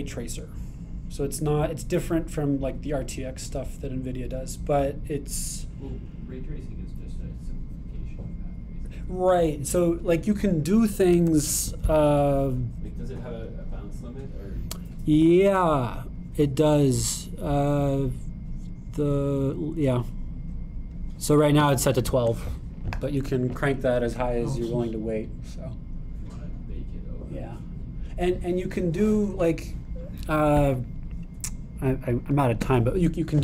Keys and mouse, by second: 21.3-33.4 drag.